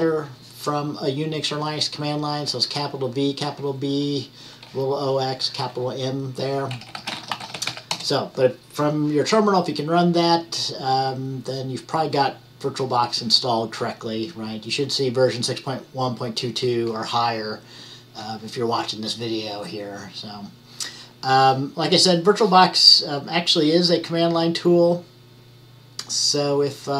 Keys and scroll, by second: 7.0-8.4 typing.